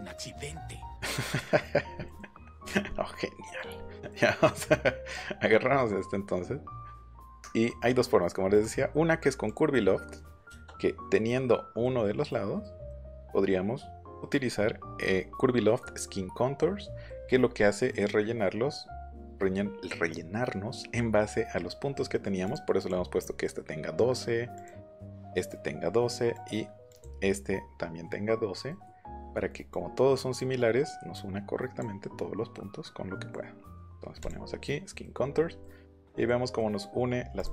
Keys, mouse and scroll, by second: 0.8 middle click, 1.3 shift+middle click, 2.0 scroll down 2, 2.0 middle click, 2.9 middle click, 3.4 middle click, 3.7 scroll down 1, 3.9 middle click, 4.4 click, 4.6 middle click, 5.7 middle click, 7.2 middle click, 7.6 middle click, 8.4 middle click, 8.5 right click, 9.5 click, 10.0 middle click, 10.4 shift+middle click, 11.8 middle click, 12.8 middle click, 17.0 middle click, 17.9 middle click, 22.1 middle click, 22.4 click, 24.5 click, 26.3 click, 26.8 click, 28.6 middle click, 29.3 middle click, 29.7 click, 31.1 click, 34.1 click, 35.0 middle click, 35.1 scroll down 1, 35.3 scroll up 1, 35.5 middle click, 37.3 click.